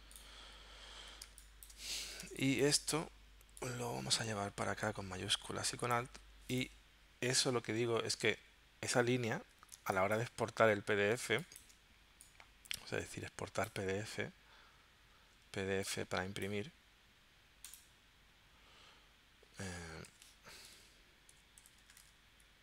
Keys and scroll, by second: 1.3 space, 2.3 space, 7.7 z, 11.3 space, 20.7-22.5 typing.